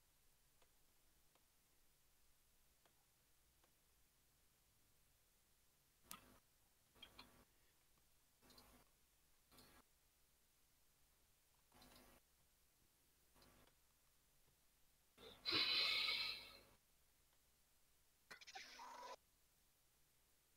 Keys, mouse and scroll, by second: 0.2 shift+click, 0.7-2.2 scroll up 5, 1.0 shift+middle click, 2.2 shift+click, 2.6 shift+click, 2.9-3.3 scroll down 5, 3.3 shift+middle click, 3.9 g, 6.6-7.0 scroll down 2, 7.0 shift+middle click, 7.7 2, 8.0 alt+click, 8.5 alt+click, 9.3 g, 11.3 s, 13.1 shift+click, 14.1 alt+click, 14.8 alt+shift+click, 15.4-15.7 middle drag, 15.7 scroll down 3, 16.0 alt+z, 16.1-16.5 middle drag, 16.5-16.9 scroll up 2, 16.9 middle click, 17.2 g, 20.2 click.